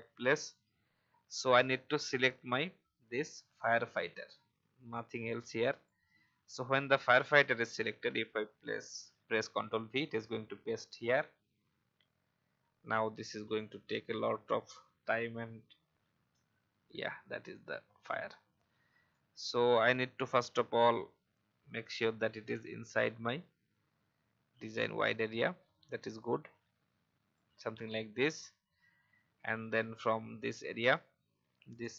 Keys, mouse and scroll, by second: 19.0-27.3 shift+drag.